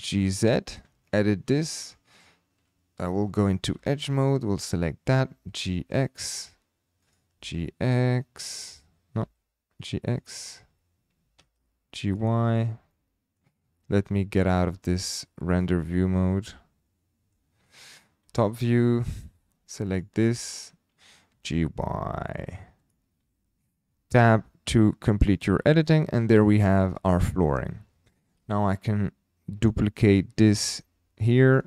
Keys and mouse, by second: 0.9 Tab, 1.8 click, 3.8 2, 4.2 click, 5.3 g, 5.3 x, 6.2 click, 7.0 click, 7.3 g, 7.3 x, 8.5 click, 9.2 g, 9.7 x, 9.8 click, 11.3 g, 11.4 y, 12.1 click, 12.9 middle click, 14.4 middle click, 16.3-17.3 middle drag, 18.2 KP_7, 19.9 click, 20.3 shift+middle click, 21.3 g, 21.4 y, 22.8 click, 24.2 Tab, 25.3-25.9 middle drag, 26.6 shift+middle drag, 27.1-27.5 middle drag, 28.4 KP_7, 29.7 shift+middle click, 30.6 shift+d.